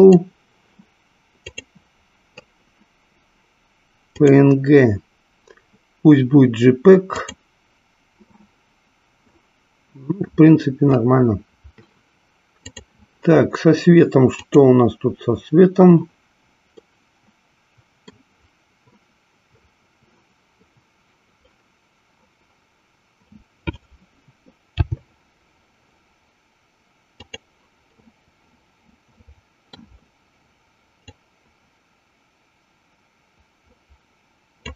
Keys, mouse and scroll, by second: 5.0-7.8 drag, 12.6 click, 14.3 click, 17.2-18.4 middle drag, 25.1 g, 27.6 click, 28.2-30.2 middle drag, 31.3-34.7 drag.